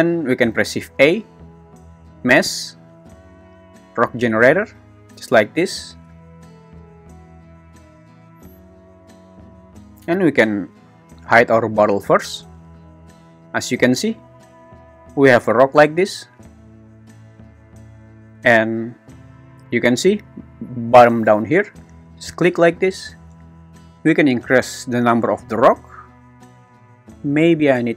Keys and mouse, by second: 0.7 shift+a, 12.2 click, 14.2 `, 15.1 g, 15.6 Escape, 17.6 `, 22.1 click, 27.5 click.